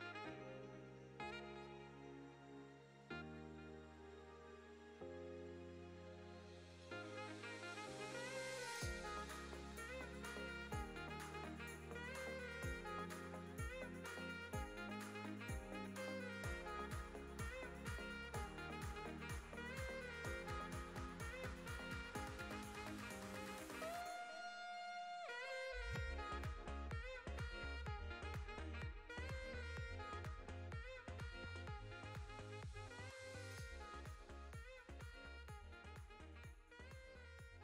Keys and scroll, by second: 2.8 Tab, 8.1 2, 10.1 g, 10.6 z, 15.3 s, 17.1 Tab.